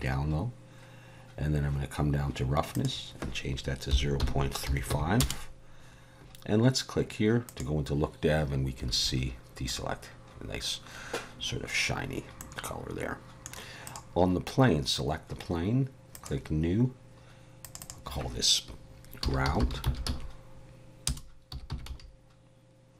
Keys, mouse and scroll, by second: 1.1-2.1 scroll down 3, 2.7 click, 7.6 click, 9.0 alt+a, 9.7-10.5 scroll up 1, 10.5-12.0 scroll up 1, 12.4 middle click, 13.9 click, 14.4-15.4 scroll down 3, 16.1 click, 17.8 click.